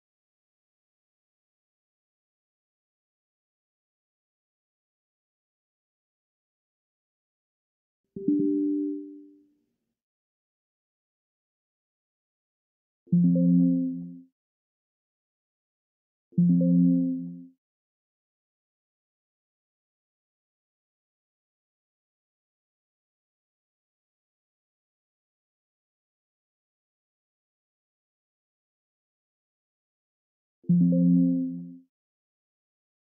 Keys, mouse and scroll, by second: 0.7 click, 2.0 click, 3.5 click, 4.5-6.7 typing, 7.5 click, 9.5 click, 12.7 click, 14.2 click, 15.9 click, 17.1 click, 18.8 click, 20.7 click, 22.2 click, 25.2 click, 26.4 click, 27.0 2, 27.7 0, 30.2 click.